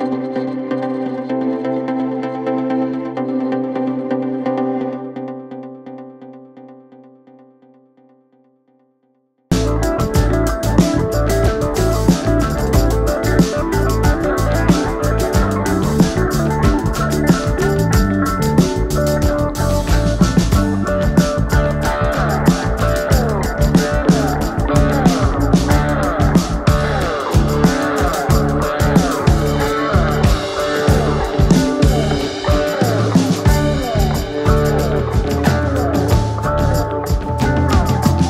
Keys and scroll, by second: 0.5 Escape, 12.5 c, 14.5 F3, 15.1 Escape, 15.4 F3, 16.3 Escape, 22.1 Escape, 22.9 Delete, 24.3 ctrl+g, 25.0 c, 31.8-33.4 typing, 35.6-37.2 typing, 37.5 Return.